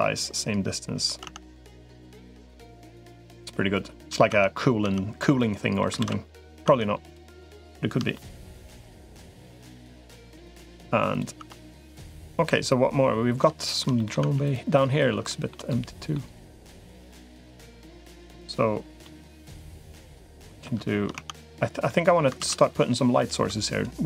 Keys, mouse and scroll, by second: 1.0 Tab, 1.7 middle click, 3.2 middle click, 4.2 Tab, 4.6 Tab, 5.3 middle click, 5.8 ctrl+s, 6.6 Tab, 7.9 shift+middle click, 10.0 middle click, 11.2 Tab, 11.9-13.2 middle drag, 13.4 shift+middle click, 13.8 middle click, 14.0 Tab, 14.6 middle click, 15.1 shift+middle click, 15.5 middle click, 16.4 middle click, 17.2 click, 18.8 middle click, 19.7 middle click, 21.0 Tab, 21.7 middle click, 22.2 ctrl+s, 22.5 middle click.